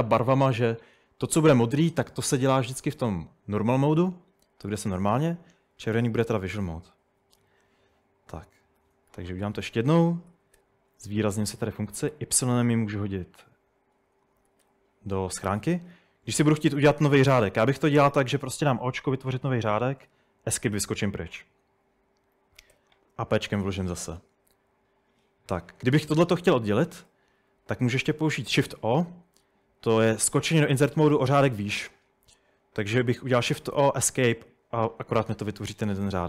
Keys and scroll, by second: 8.7 Escape, 9.1-11.1 typing, 12.2 typing, 14.5 typing, 18.7 o, 20.1 Escape, 22.8 p, 28.5 shift+o, 33.7 Escape.